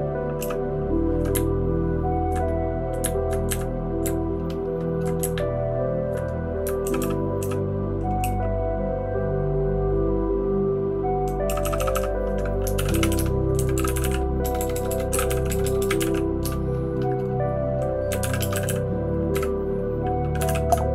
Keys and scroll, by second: 0.4 }, 1.3 Up, 1.8-2.2 Up, 3.0 Up, 3.5 Up, 4.0 Right, 4.5-4.9 Right, 5.2 Up, 5.7-6.0 Up, 6.8 {, 7.0 {, 7.4 {, 8.2 }, 11.4 }, 11.6 }, 11.7 }, 11.9 }.